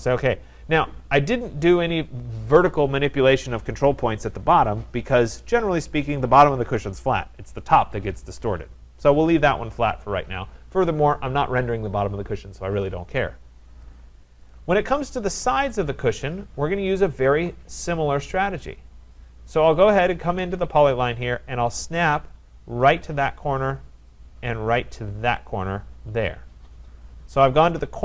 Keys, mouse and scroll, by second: 0.4 click, 1.1-1.6 scroll, 14.4 right click, 15.0 scroll, 15.6 scroll, 16.3 click, 16.8 scroll, 19.9 click, 23.1 click, 25.4 click, 27.2 Return, 27.9-28.0 scroll.